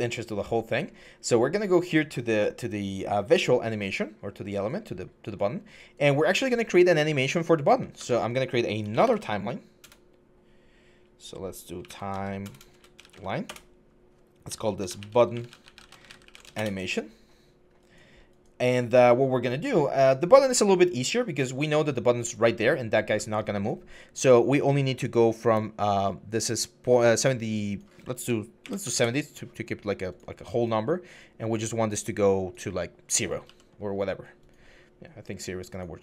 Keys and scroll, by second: 7.8 Tab, 8.6-9.6 typing, 11.3-12.9 typing, 13.3 Return, 14.3-16.5 typing, 22.1-22.9 typing, 28.2-28.9 typing, 33.2 ctrl+z.